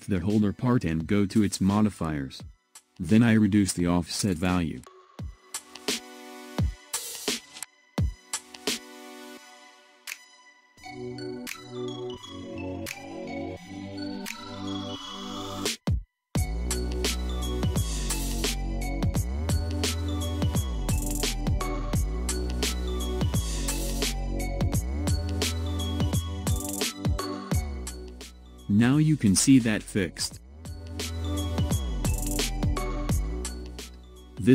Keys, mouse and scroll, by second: 1.1 ctrl+z, 1.8-5.3 drag, 5.3 ctrl+z, 7.0-11.4 drag, 24.7-29.2 drag, 30.2-30.8 scroll down 5, 31.6-34.5 shift+middle drag.